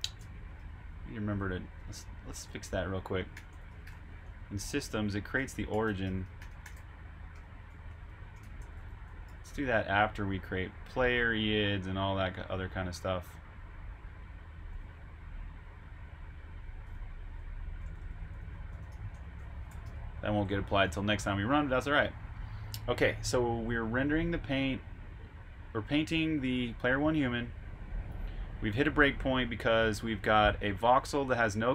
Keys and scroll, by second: 0.5 super+Tab, 3.1-6.5 typing, 7.8 typing, 10.9-11.9 typing, 14.0 typing, 16.5-20.3 typing, 20.8 super+Tab, 21.4-22.1 typing.